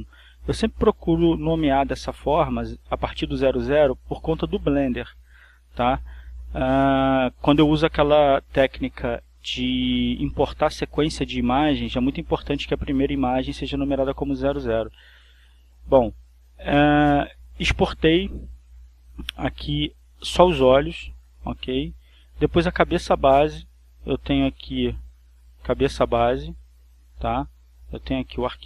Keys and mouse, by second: 5.1 click, 8.4 click, 9.3 click, 15.2 click, 16.6 click, 19.2 click, 21.1 click, 21.1 middle click, 22.1-23.1 drag, 23.7 click, 23.7-24.9 middle drag, 24.9 click, 25.9 click, 27.9 click.